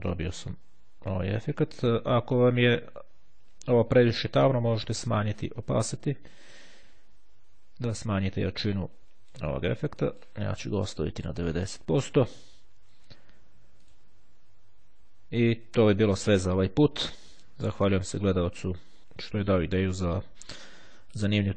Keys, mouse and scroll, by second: 5.2-10.0 drag, 10.2 click, 11.1 KP_9, 11.3 KP_0, 13.9 click.